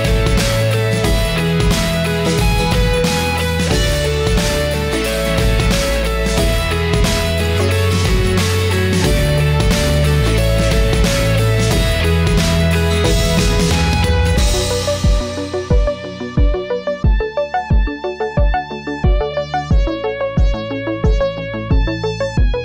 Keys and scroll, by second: 7.7 ctrl+j, 9.9 ctrl+t, 13.0 Return, 17.3 ctrl+t, 20.1 Return.